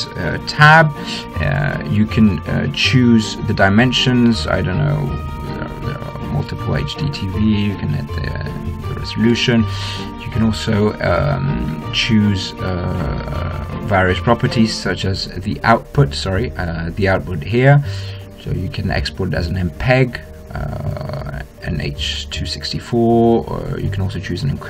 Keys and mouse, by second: 6.1-8.2 drag, 8.6-10.3 drag, 10.3 middle click, 14.2-18.8 drag, 19.2-20.8 drag, 21.2 middle click, 24.0 middle click.